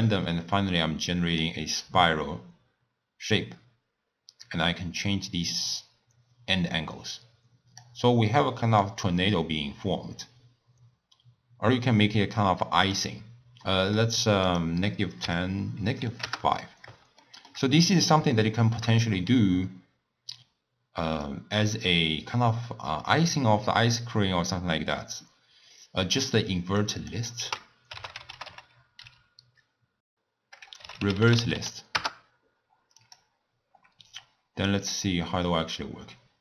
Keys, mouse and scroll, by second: 4.4-7.5 drag, 8.8-11.8 drag, 13.6 middle click, 14.5-17.3 drag, 17.3-17.8 shift+middle drag, 17.8-18.4 scroll up 2, 18.4-21.3 shift+middle drag, 21.3-24.3 drag, 26.8-27.4 drag, 27.4 ctrl+a, 34.8-36.4 drag.